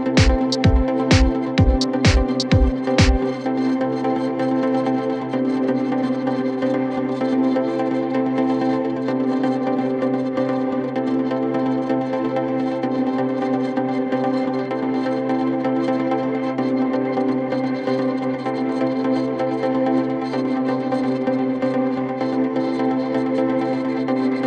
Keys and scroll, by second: 6.3 shift+q, 7.5 ctrl+g, 12.3 ctrl+g, 18.7 ctrl+k.